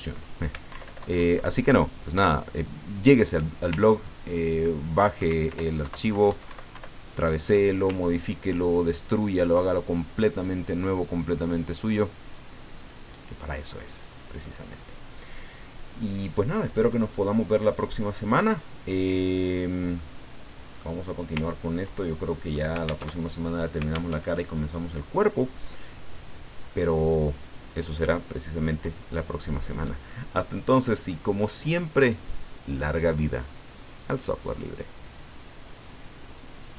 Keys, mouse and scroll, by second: 0.7 alt+Down, 2.1 alt+Up, 4.0-4.6 ctrl+scroll up 2, 5.8 alt+Right, 6.7 alt+Down, 8.2 ctrl+scroll down 2, 8.9-9.2 ctrl+scroll down 2, 10.6 click, 11.2 click, 11.7 click, 12.8 click, 13.3 click, 16.6-18.5 drag, 20.0 click, 21.4-21.7 ctrl+scroll down 2, 22.1 ctrl+click, 22.2 ctrl+middle click, 22.4 click, 22.5 middle click, 23.1 alt+Tab, 24.1 alt+Tab, 35.6 click, 36.7 click.